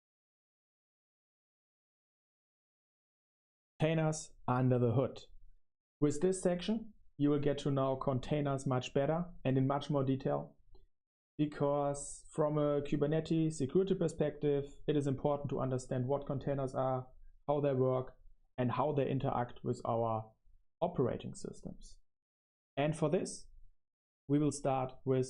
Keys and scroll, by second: 1.5 super+1, 1.8 super+1.